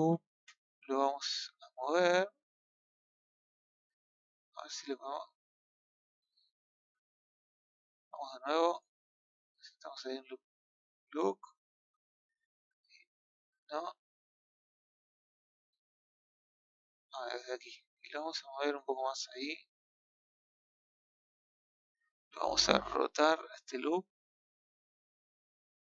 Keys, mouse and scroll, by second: 1.1 click, 4.7-6.6 drag, 6.6 ctrl+z, 9.2 click, 10.4 click, 12.5-13.6 drag, 13.6 ctrl+z, 14.7 click, 17.2-20.1 drag, 22.7 click, 24.1 click.